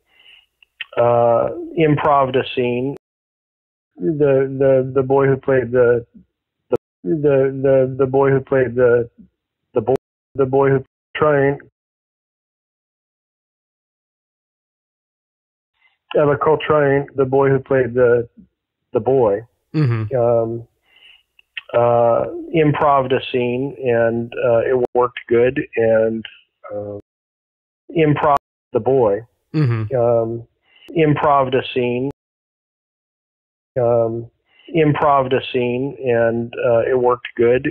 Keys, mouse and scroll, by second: 2.9 space, 3.6 ctrl+shift+Delete, 3.8 space, 6.6 space, 6.8 click, 6.9 space, 7.8-9.8 drag, 9.8 space, 10.1 click, 10.1 space, 10.7 space, 10.9 click, 11.0 space, 12.0 click, 12.4 space, 13.4-14.9 drag, 15.6 click, 15.6 space, 20.1 click, 20.5 click, 21.9-24.3 drag, 24.7 Delete, 25.7-26.9 drag, 26.9 space, 27.5 ctrl+shift+Delete, 27.8 space, 28.2 space, 28.5 click, 28.6 space, 29.4 click, 29.9 click, 31.3 click, 32.0 space, 32.3 click, 33.6 click, 33.6 space, 34.4 ctrl+s.